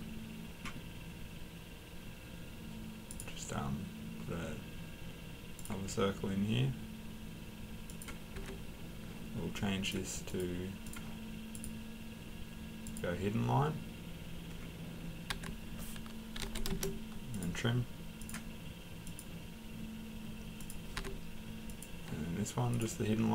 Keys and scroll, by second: 8.3 Escape, 15.3 Escape, 16.1-16.9 typing, 20.9 Escape.